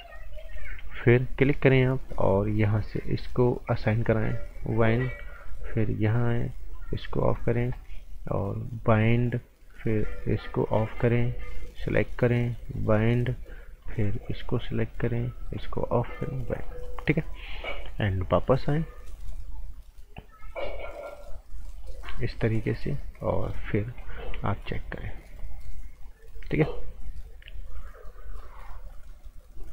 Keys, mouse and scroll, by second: 0.4 g, 0.8 click, 3.7 click, 16.6 right click, 21.8 click, 22.7 z, 23.3 right click, 24.3 z, 24.6 click, 24.9-25.4 scroll down 1, 25.4 click, 26.3-26.7 scroll up 1, 26.7 click.